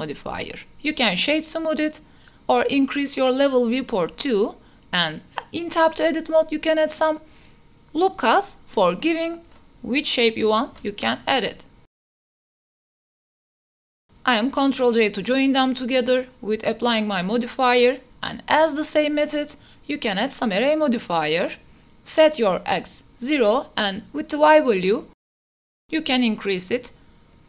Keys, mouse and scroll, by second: 0.2-1.1 drag, 1.6-2.3 middle drag, 3.3 click, 3.9-4.3 middle drag, 4.3 Tab, 4.5 middle click, 6.1 ctrl+r, 6.9 click, 7.1 middle click, 7.6 middle click, 8.0 click, 8.0 right click, 8.4 ctrl+r, 10.1 click, 10.1 right click, 10.5 s, 11.9 shift+click, 12.0 g, 12.8-13.1 drag, 14.5 shift+drag, 15.1 click, 15.8 ctrl+a, 16.5 shift+click, 17.5 ctrl+j, 18.5 click, 19.3-19.9 drag, 19.9 ctrl+a, 20.2-20.7 drag, 22.0 click, 23.9-26.0 drag, 26.7 shift+middle click, 27.1 KP_0.